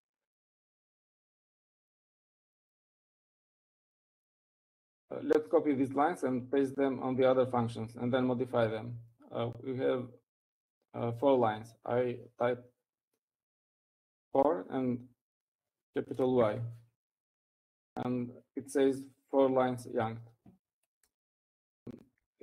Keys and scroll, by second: 3.4 Escape, 4.9 Up, 5.1 Up, 16.3 4, 18.3 y.